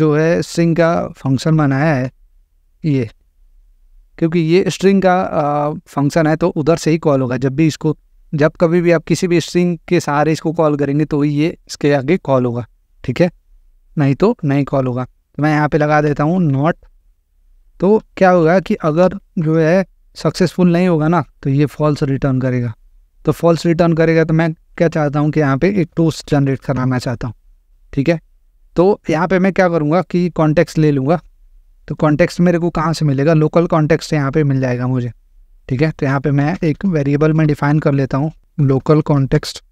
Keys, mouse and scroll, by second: 1.3-2.0 typing, 2.0 Return, 14.5 click, 15.9 typing, 17.1 click, 18.2 typing, 18.9 Left, 19.4 Return, 25.6-26.8 typing, 26.8 Return, 31.9 click, 33.3 click, 34.0 click, 35.7 click, 36.5 Return, 36.7 Return, 36.7-39.7 typing, 39.3 Return.